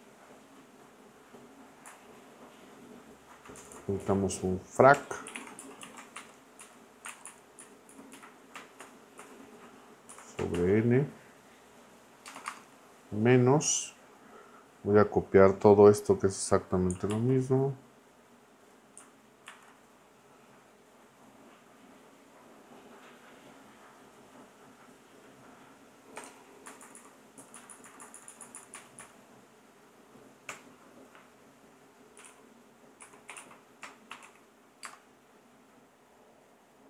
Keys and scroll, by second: 1.9 Left, 3.7 Left, 4.0 Right, 4.7-6.6 typing, 7.2 Left, 8.0 Left, 8.1 Right, 8.8 shift+], 9.2 shift+[, 10.1 n, 10.5 shift+], 12.2 space, 12.3 -, 12.5 space, 17.1 super+c, 19.5 super+v, 26.1 BackSpace, 26.2 x, 26.6 Left, 30.5 \, 31.9-34.8 typing.